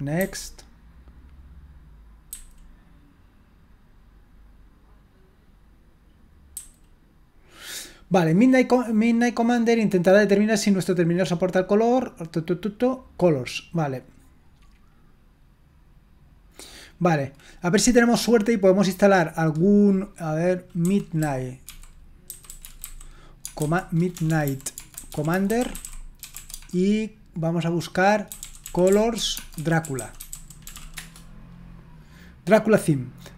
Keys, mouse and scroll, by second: 19.1 click, 20.6-27.0 typing, 28.2-31.2 typing.